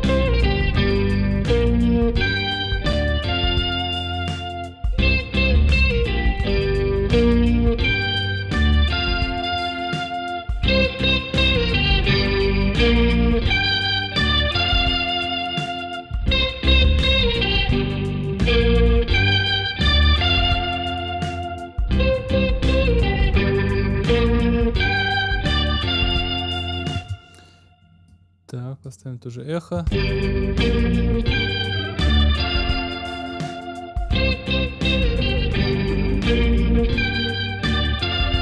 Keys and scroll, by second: 26.9 space, 29.7 space.